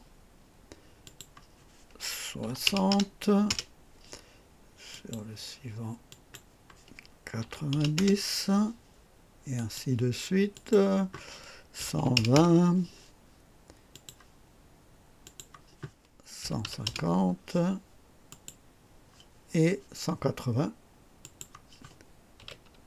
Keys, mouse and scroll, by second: 0.9 click, 2.3 KP_6, 2.6 KP_0, 3.4 Return, 4.8 click, 6.0 click, 7.3 KP_9, 7.6 KP_0, 7.9 Return, 9.5 click, 10.4 click, 11.7 KP_1, 11.9 KP_2, 12.1 KP_2, 12.2 Return, 12.2 KP_0, 13.8 click, 15.1 click, 16.3 KP_1, 16.5 KP_5, 16.7 KP_5, 17.0 KP_0, 18.2 click, 21.1 click, 22.3 KP_1.